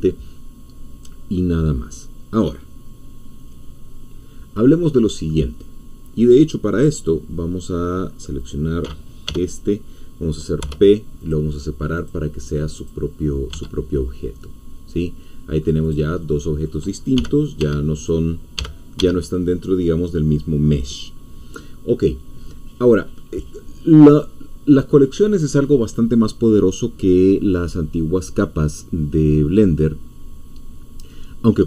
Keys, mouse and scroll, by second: 8.4 click, 9.3 l, 10.6 p, 12.8 click, 13.5 Tab, 14.1-14.4 scroll down 1, 14.4-15.8 middle drag, 15.8 click, 16.2-17.6 middle drag, 17.6 Escape, 18.1 click, 18.6 g, 19.0 Escape.